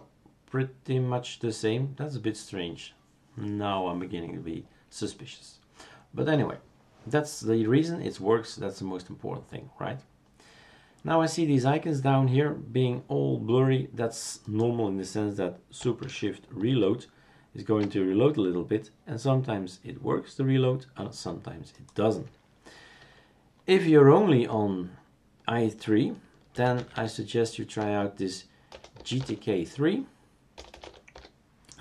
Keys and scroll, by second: 16.7 shift+super+r, 26.3-31.8 typing.